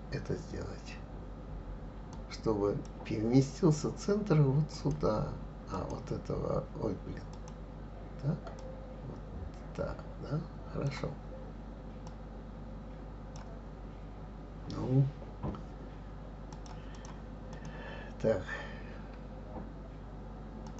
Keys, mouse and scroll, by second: 4.7 click, 5.8 click, 7.3 click, 8.6 click, 12.1 click, 16.5-17.0 drag, 17.5 click, 20.6 click.